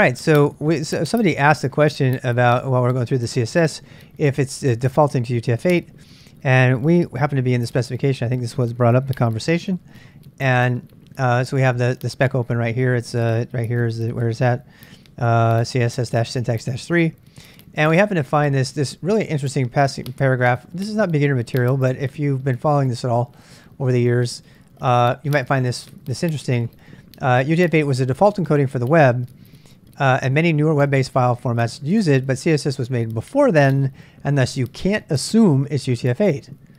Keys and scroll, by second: 10.6 ctrl+a, 10.8 ctrl+a.